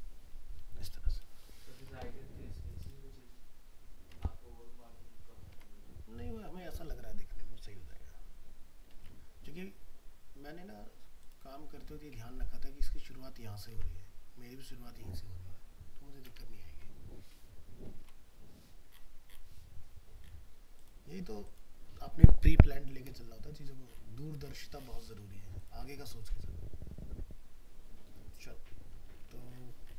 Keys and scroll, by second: 9.0 alt+Tab, 13.7 alt+Tab.